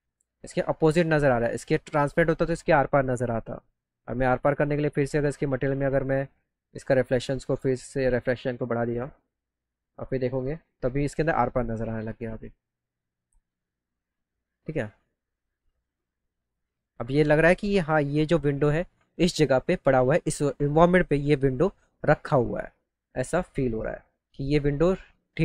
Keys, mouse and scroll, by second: 0.1 click, 3.3 scroll up 1, 3.9 click, 6.0 click, 7.3 click, 8.8 click, 9.7 click, 15.9 click.